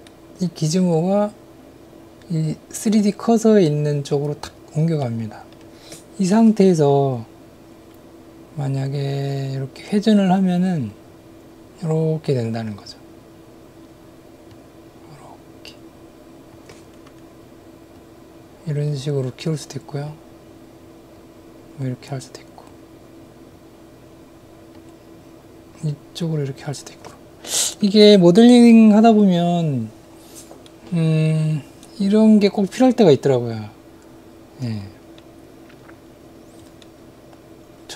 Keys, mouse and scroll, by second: 0.1 middle click, 5.0 middle click, 6.3 middle click, 10.9-12.6 drag, 14.5-16.5 drag, 18.0-20.1 drag, 21.1-22.7 drag, 25.0-27.0 drag, 30.6-35.2 middle drag, 36.9-37.9 middle drag.